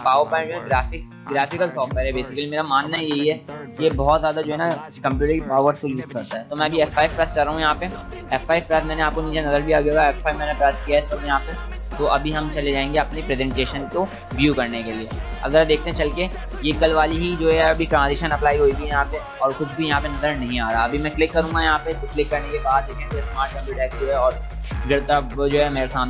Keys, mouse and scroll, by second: 8.2 F5, 21.9 click.